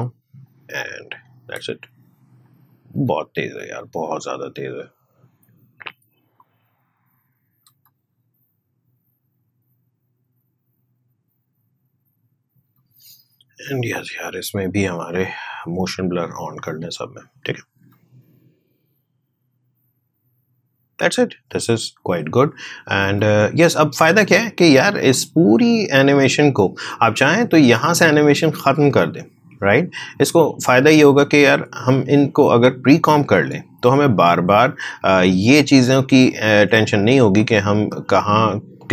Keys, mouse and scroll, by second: 0.8 click, 1.5 space, 4.1-7.7 drag, 7.7 space, 12.6 space, 13.7 click, 17.8 space, 23.0 space, 23.9 click, 28.5-33.4 drag.